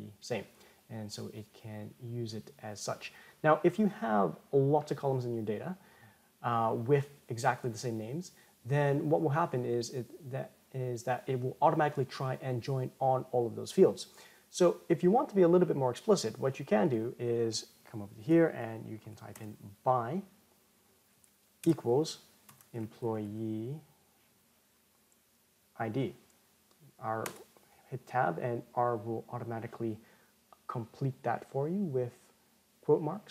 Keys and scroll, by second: 28.0 Tab.